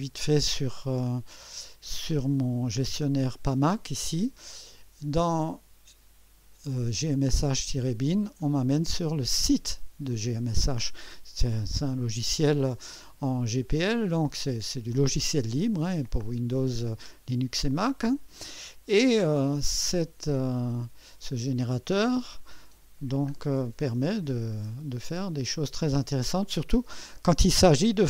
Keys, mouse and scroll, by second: 3.2 click, 5.3 click, 8.4 click, 11.9-12.6 scroll down 4, 13.9-14.3 scroll down 1, 14.7 scroll down 1, 17.7-18.7 scroll down 3, 19.4 scroll down 2, 20.2-21.4 scroll down 6, 22.2-24.4 scroll down 7.